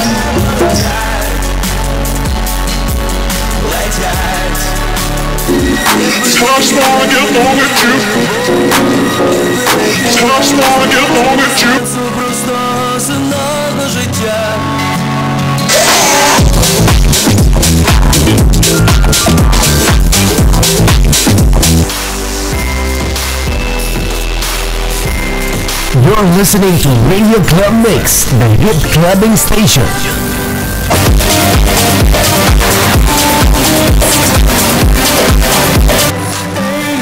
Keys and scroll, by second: 0.8 Page_Down, 11.7 Page_Down, 21.8 Page_Down, 36.0 Page_Down.